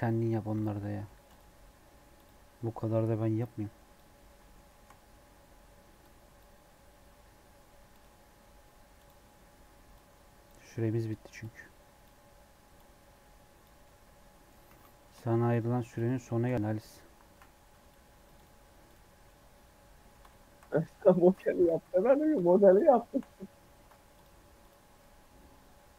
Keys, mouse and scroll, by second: 0.2 scroll up 2, 0.4 click, 0.7 middle click, 1.2-4.2 drag, 4.2 middle click, 4.5 shift+scroll up 1, 4.6-5.9 shift+middle drag, 5.9-13.7 drag, 13.7 middle click, 14.6 a, 14.7 middle click, 15.4-17.2 shift+drag, 17.2 ctrl+l, 18.8 click, 19.2-20.3 middle drag, 20.3 ctrl+z, 21.7 ctrl+z, 22.7 shift+click, 23.7 ctrl+l, 24.6 click, 25.0-25.9 middle drag.